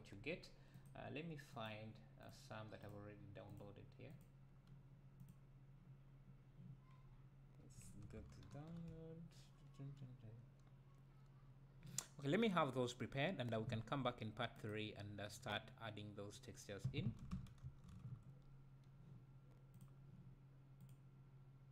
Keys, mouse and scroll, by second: 13.9-14.5 scroll up 2, 14.5 scroll up 1, 14.7-15.5 drag, 19.9-21.0 drag.